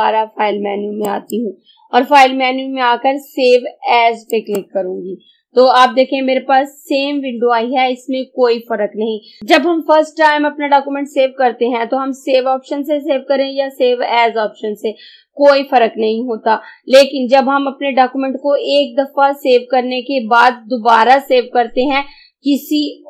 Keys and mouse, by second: 4.4 click.